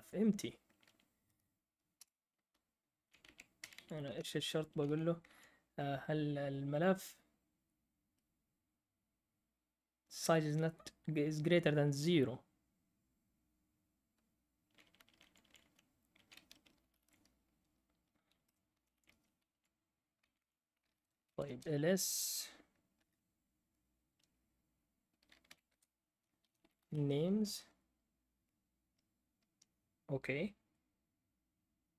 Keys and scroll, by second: 2.0 Up, 2.0 Return, 2.5 Down, 3.0 Down, 4.0 Up, 4.0 Right, 4.8 Down, 15.2 Up, 15.5 Up, 16.1 Up, 16.8 typing, 18.2-19.4 typing, 20.9-23.4 typing, 24.7-27.4 typing.